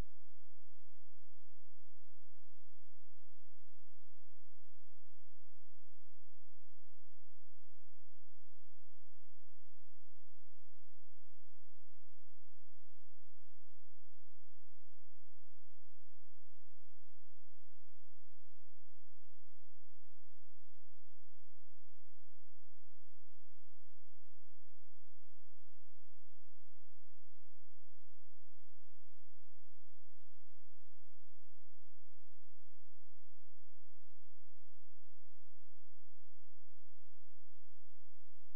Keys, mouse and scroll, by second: 6.7 right click, 7.7 click, 8.9 ctrl+a, 9.5 click, 12.4 shift+l, 12.7 shift+o, 13.6 ctrl+space, 15.1 click, 20.1 space, 21.4 click, 22.4-24.2 scroll down 1, 24.3 click, 25.1 F4, 28.2-30.0 scroll down 1, 30.4-31.1 scroll up 1, 32.9-33.3 scroll down 1, 34.1 click, 37.8 shift+t, 38.1 a.